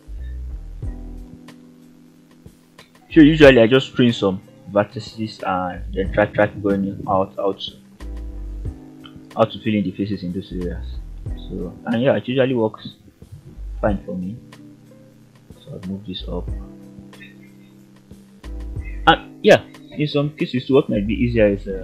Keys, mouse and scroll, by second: 0.4-0.8 ctrl+right drag, 1.0-1.4 middle drag, 1.6-2.1 scroll up 1, 3.1-3.4 ctrl+right drag, 4.2-4.8 ctrl+right drag, 5.5 shift+click, 7.8 f, 8.3 click, 8.8 g, 10.3 click, 10.7-11.3 middle drag, 11.7 g, 12.7 click, 13.4 click, 13.7 g, 15.7 click, 17.1 ctrl+click, 18.3 f, 19.6 click, 20.4 shift+click.